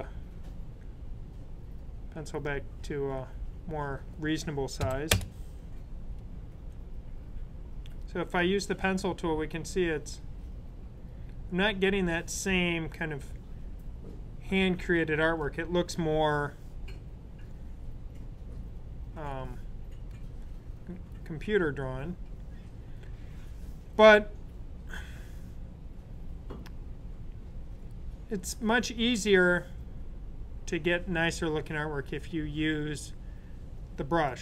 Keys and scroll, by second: 4.6 2.